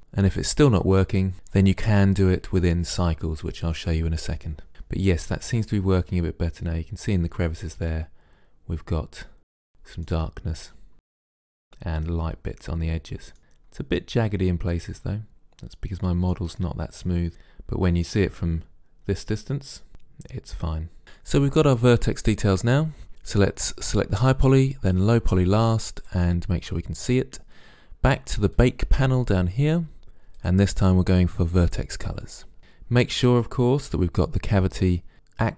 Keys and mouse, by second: 5.3-6.8 middle drag, 6.8 click, 6.9-7.2 middle drag, 7.6-9.8 middle drag, 9.8-10.2 drag, 10.2 middle drag, 10.8-11.2 middle drag, 11.4-12.0 middle drag, 13.4-14.4 middle drag, 15.7-17.1 middle drag, 17.2-19.8 middle drag, 23.9-27.9 drag, 28.6-32.1 drag.